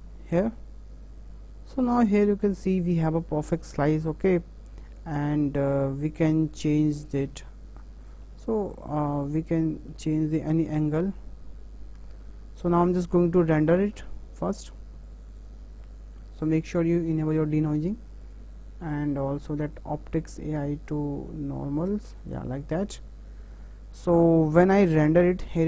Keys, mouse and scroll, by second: 7.4-12.5 ctrl+middle drag, 13.9 click, 15.0-25.6 drag.